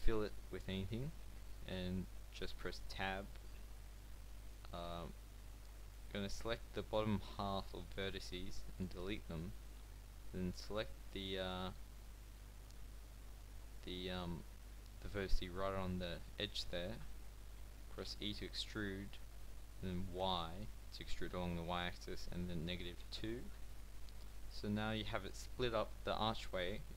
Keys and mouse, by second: 1.6 Tab, 5.2 a, 5.7 b, 7.8 x, 9.6 b, 12.1-16.3 middle drag, 18.0 e, 25.1 a.